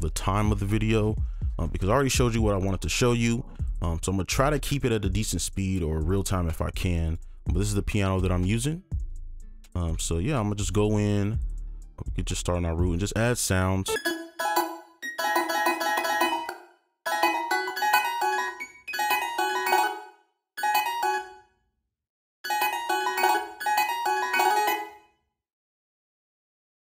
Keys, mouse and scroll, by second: 9.5 right click, 11.2-11.5 scroll up 1, 14.1-16.0 typing, 14.2 ctrl+click, 14.3 alt+scroll down 1, 14.7-15.1 scroll up 1, 15.7 scroll up 1, 16.0 right click, 16.4 ctrl+click, 16.8 ctrl+a, 16.9 alt+scroll down 2, 17.0 right click, 17.0-18.9 typing, 17.3 ctrl+click, 18.1 right click, 19.4 ctrl+a, 19.5-19.8 alt+scroll down 1, 20.0 ctrl+click, 20.5 alt+right click, 20.5 space, 20.7 ctrl+click, 21.1 ctrl+space, 21.1 ctrl+click, 21.7 ctrl+click, 21.9 shift+click, 22.3 right click, 22.3 click, 22.4 space, 22.5-22.9 scroll up 1, 22.9 right click, 23.3 right click, 23.3 space, 23.5 ctrl+click, 23.5 alt+scroll up 1, 23.7 right click, 24.7 space, 25.1 scroll up 1, 25.2 ctrl+click, 25.4 shift+click, 25.8 right click, 26.2 ctrl+click, 26.3 shift+click, 26.9 alt+click.